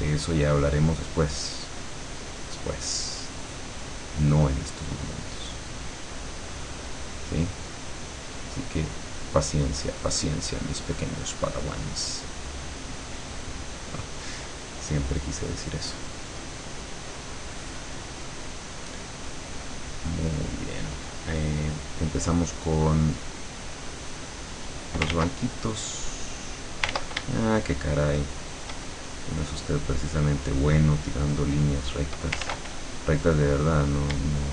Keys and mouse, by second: 2.9-4.3 drag, 5.5 click, 7.0 click, 8.1 click, 9.6-11.3 drag, 13.1 click, 14.9 middle click, 15.5 click, 16.3 middle click, 16.9 click, 17.5-18.7 middle drag, 18.7 click, 19.3-20.5 middle drag, 23.7-25.1 drag, 25.2 ctrl+z, 25.8 click, 27.0 ctrl+z, 27.5-28.9 ctrl+shift+drag, 29.4 click, 30.8 click, 32.5 ctrl+z, 33.2 click, 34.3-34.5 shift+drag.